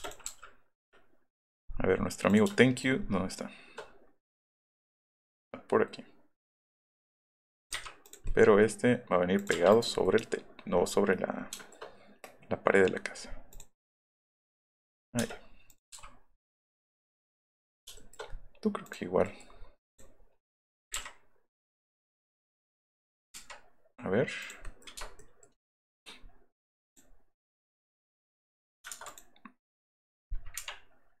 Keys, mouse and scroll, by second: 0.3 m, 2.6 shift+middle click, 2.8 shift+middle click, 6.8 click, 7.6 click, 7.8 Up, 8.0 click, 8.4 middle click, 9.5 Up, 9.9 scroll down 2, 13.5 click, 14.9 scroll down 2, 15.1 space, 15.2 scroll up 2, 15.6 click, 16.5 click, 17.9 shift+middle click, 18.2 middle click, 18.8 click, 19.8 click, 20.4 click, 20.7 click, 20.9 Up, 21.8 click, 22.0 scroll down 1, 23.1 click, 24.3 click, 24.9 shift+middle click, 25.1 shift+click, 26.9 click, 27.9 click, 28.9 ctrl+z, 29.0 click.